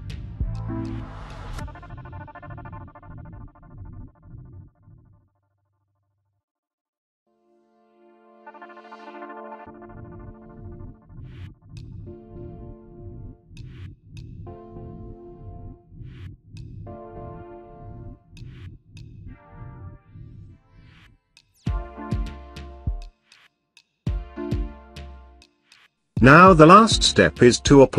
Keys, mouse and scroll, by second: 0.5-2.1 drag, 2.1 click, 2.8 click, 3.3 space, 3.3-7.9 ctrl+drag, 7.9 ctrl+space, 8.5 ctrl+click, 8.6 ctrl+space, 9.6 ctrl+space, 11.6-20.0 ctrl+drag, 20.0-23.0 ctrl+drag.